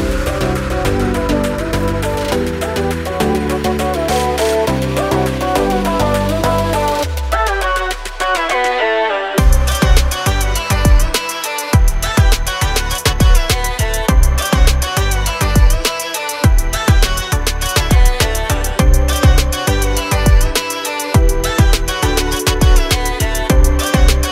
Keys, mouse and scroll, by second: 0.5 click, 4.3 click, 5.5 click, 7.3 click, 8.0 click, 9.3 ctrl+o, 11.2 click, 12.4 scroll down 1, 13.3 click, 14.5 scroll down 1, 15.4 click, 16.1 click, 17.8 click, 19.3 4, 21.0 Page_Down, 21.7 Page_Up, 23.1 click.